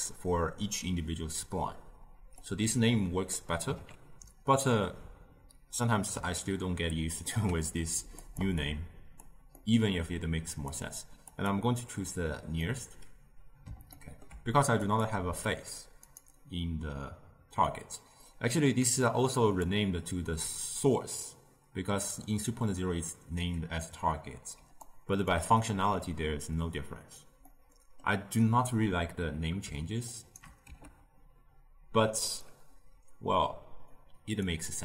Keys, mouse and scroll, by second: 2.4-5.5 drag, 7.1 ctrl+h, 8.1 click, 8.5 click, 9.5-10.4 middle drag, 10.4-12.5 drag, 12.5-14.8 middle drag, 14.8-15.9 drag, 15.9-18.7 right drag, 18.7 d, 19.0-19.5 drag, 19.5 d, 22.3 d, 24.5 d, 24.7 right click, 27.4-29.9 middle drag, 29.9 shift+right click, 30.6 g, 33.9 click.